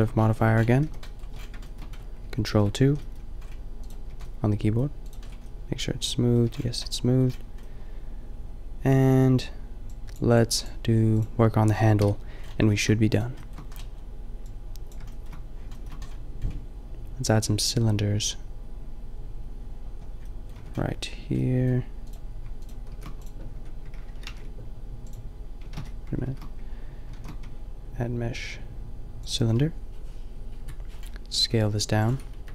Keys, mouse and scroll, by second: 0.8 KP_5, 2.5 ctrl+2, 2.8 a, 4.0-5.6 middle drag, 4.1 a, 6.6 a, 11.9 KP_5, 12.4-15.2 middle drag, 17.8-20.2 middle drag, 20.6 Tab, 22.9 click, 22.9 shift+s, 23.5 Tab, 24.3 ctrl+alt+shift+c, 25.8 ctrl+z, 26.2 shift+s, 27.1 shift+a, 30.6 KP_Decimal, 31.4 s, 32.3 KP_Decimal.